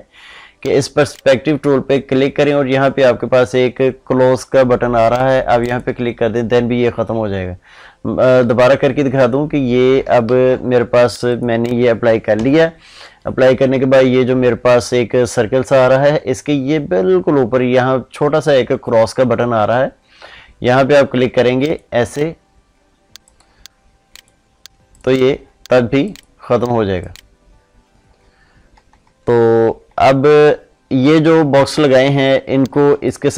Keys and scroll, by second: 8.3 ctrl+z, 10.1 ctrl+shift+z, 12.3 ctrl+shift+i, 32.8 ctrl+space.